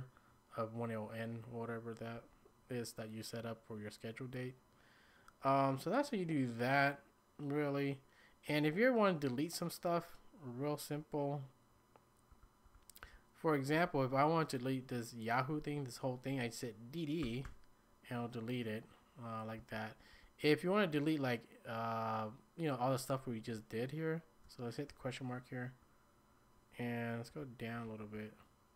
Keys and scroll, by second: 12.1-13.7 typing, 17.2 typing, 19.6-20.1 typing, 24.6-25.4 typing, 27.1-28.5 typing.